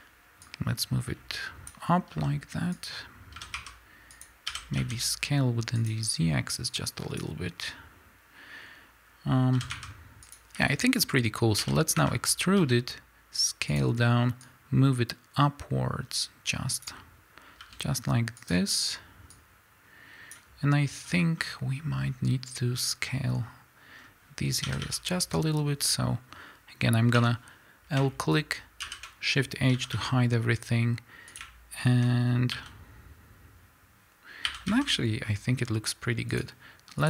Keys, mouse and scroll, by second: 0.5-3.4 drag, 2.1 s, 6.6-11.6 drag, 9.6 s, 11.6 e, 12.6 s, 13.9 click, 14.5-18.7 drag, 17.6 s, 19.4-31.3 drag, 21.1 scroll down 2, 21.3-23.9 scroll up 2, 23.9-24.6 scroll down 2, 24.6 a, 27.1 l, 28.8 shift+h, 29.7 a, 32.5 a, 34.5 s, 36.4 click.